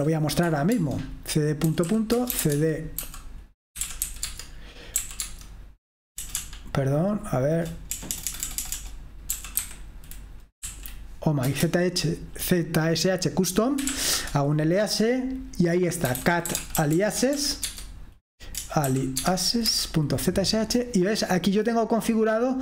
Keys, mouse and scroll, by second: 0.0-10.2 typing, 10.6 Right, 11.4 Return, 11.5-12.2 typing, 13.6-14.7 typing, 15.8-21.1 typing, 22.4 typing.